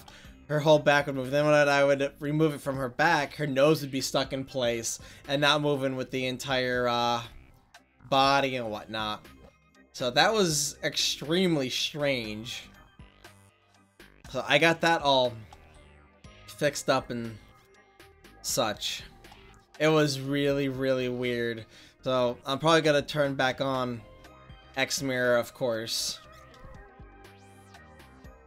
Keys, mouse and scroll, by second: 16.8 click, 18.1 click, 24.3-28.4 drag.